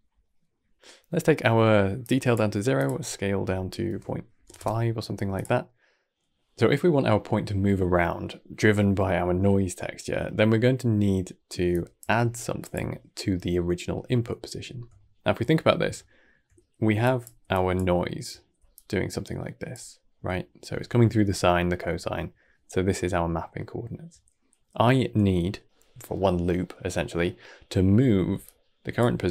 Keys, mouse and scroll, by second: 0.1 middle click, 1.9-4.4 drag, 4.4 KP_Enter, 5.7-8.0 middle drag, 6.4 scroll down 2, 9.7 scroll down 1, 10.3-11.6 middle drag, 11.6 click, 13.4-16.8 middle drag, 16.8 d, 16.9 click, 17.3 d, 17.4 click, 17.9 shift+middle click, 18.5 d, 18.6-19.6 drag, 19.6 d, 19.6 d, 20.0 scroll down 1, 20.2-25.7 shift+middle drag, 28.2 d, 28.3 click, 29.2 d.